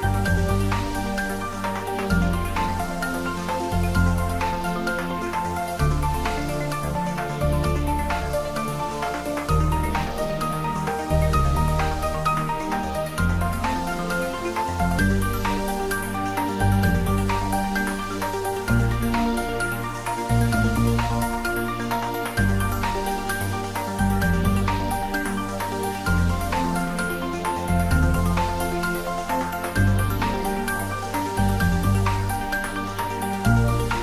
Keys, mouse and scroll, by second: 1.8 click, 4.7 click, 11.0 click, 15.4-16.1 scroll down 1, 17.0 click, 18.2 click, 23.3 Tab, 24.4 click, 26.2 Left, 28.8 Return.